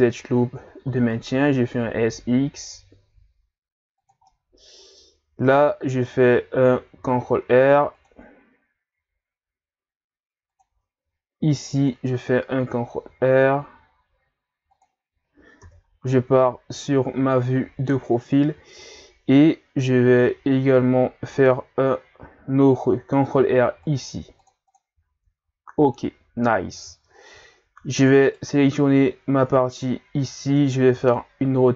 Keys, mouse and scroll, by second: 0.8 s, 4.3-7.0 middle drag, 7.0 ctrl+r, 11.4 ctrl+r, 15.6 KP_3, 17.3 scroll up 1, 23.4 ctrl+r, 24.7 click, 25.4 ctrl+scroll up 1, 26.8 z, 27.2-28.1 ctrl+scroll up 1, 28.2 right click, 28.6 b, 30.9 r.